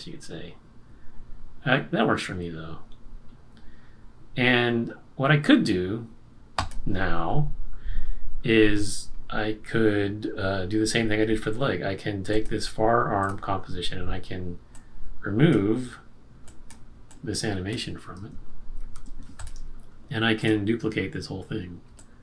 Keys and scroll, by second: 18.7 shift+F5.